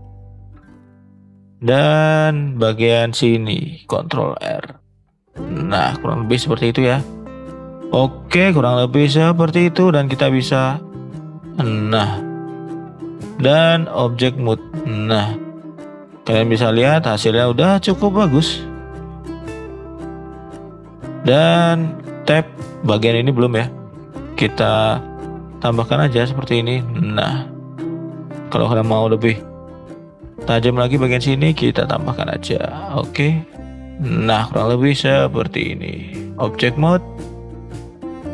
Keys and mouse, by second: 0.5 shift+middle click, 0.8-1.6 middle drag, 1.8 middle click, 2.3 shift+middle click, 2.8 middle click, 3.6 ctrl+r, 6.9-7.5 middle drag, 8.1 shift+middle click, 8.3-8.8 middle drag, 9.2 middle click, 12.0-13.0 middle drag, 13.7 click, 14.5 click, 15.0 middle drag, 15.4 shift+middle drag, 15.7-16.3 middle drag, 16.7-17.1 middle drag, 17.5 middle drag, 18.7 shift+middle drag, 19.4 shift+middle drag, 20.1 shift+middle click, 20.6 middle click, 21.4 click, 22.3 Tab, 22.6 middle drag, 23.0 shift+middle drag, 23.2-23.5 middle drag, 24.0 shift+middle click, 25.0 ctrl+r, 27.9 middle click, 28.8 ctrl+r, 33.3 middle click, 34.6 middle click, 35.9-36.5 drag, 37.0 middle drag, 37.5-37.9 middle drag, 38.1 click.